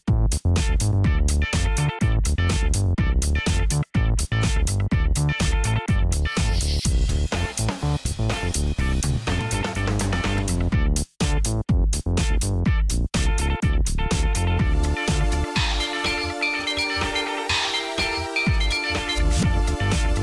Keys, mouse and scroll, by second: 0.0-0.9 typing, 1.9 typing, 3.4-11.8 typing, 16.2-18.3 typing, 20.1 typing.